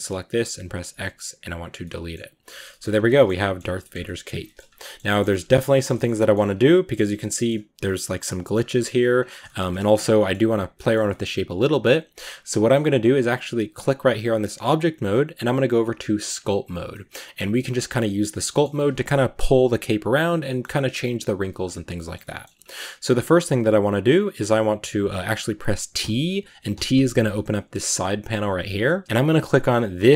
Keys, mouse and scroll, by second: 1.5 x, 1.6-2.2 scroll up 1, 2.2 right click, 2.3-2.6 shift+middle drag, 2.6-3.2 scroll up 5, 3.0 shift+middle click, 3.2 middle click, 3.8 scroll up 2, 3.9 middle click, 4.5 scroll up 1, 4.5 Tab, 4.7-5.3 shift+middle drag, 5.3 a, 5.5-6.0 scroll up 2, 5.6-5.9 shift+middle drag, 6.0 middle drag, 6.1 scroll down 1, 6.3-7.2 scroll up 3, 7.2 middle drag, 7.5 Tab, 7.7-8.4 middle drag, 8.4 scroll down 2, 8.5 middle click, 9.0 scroll down 3, 9.3 shift+middle click, 9.9 scroll down 2, 10.0-16.3 middle drag, 16.3 click, 16.7-20.2 middle drag, 20.2 scroll up 1, 20.2-22.4 middle drag, 22.4-25.4 scroll down 1, 25.4-25.9 scroll down 1, 25.9 scroll down 1, 26.0 t, 26.6 t, 26.8 t, 29.0 g.